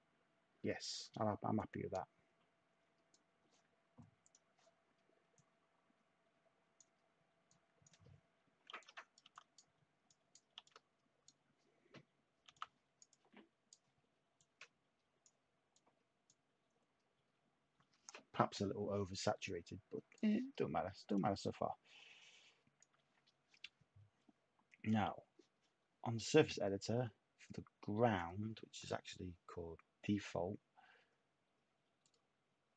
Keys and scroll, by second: 8.7-9.2 typing, 10.5 typing, 12.4 t.